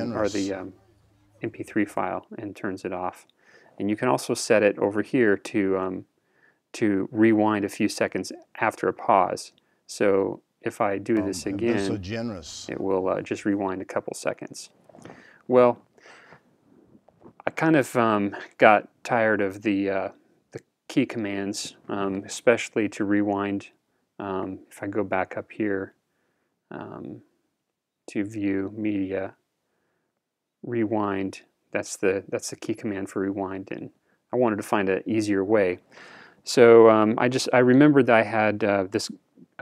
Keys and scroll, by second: 2.0 super+Return, 11.1 super+Return, 13.7 super+Return.